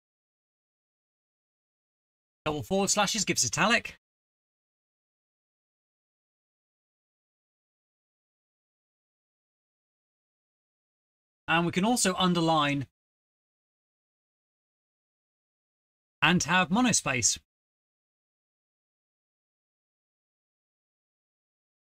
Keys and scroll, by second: 0.3 Return, 0.3 Return, 0.4 ctrl+v, 3.9 /, 4.0 /, 4.4 Home, 4.6 /, 6.3 typing, 10.8 Return, 10.9 ctrl+v, 11.6 space, 11.6 space, 11.9 Home, 12.2 space, 16.8 Return, 16.8 ctrl+v, 17.4 Home, 17.5 Return, 18.2-18.9 typing, 18.6 End.